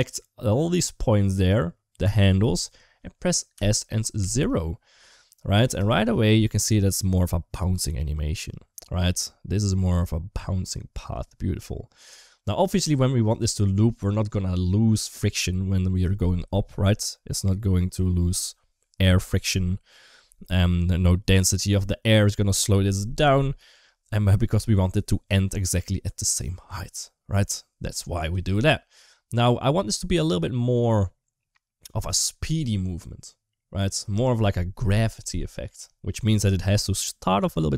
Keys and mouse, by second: 3.4 s, 12.8-13.1 drag, 14.0 click.